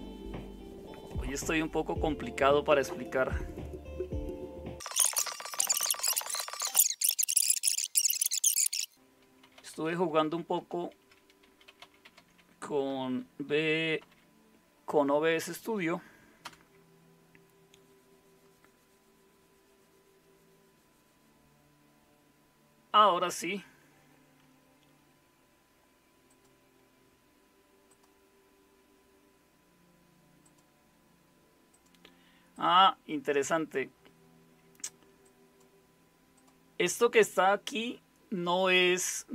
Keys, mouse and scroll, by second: 8.9-14.0 typing, 16.4 Return.